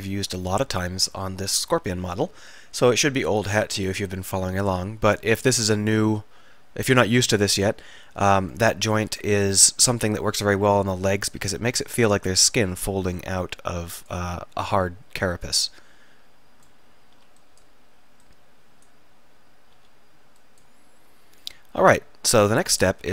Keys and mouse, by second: 0.0 middle click, 0.1 click, 0.2-2.6 middle drag, 8.5-9.7 drag, 12.1-15.5 middle drag, 17.3 s, 17.5 click, 19.9 s.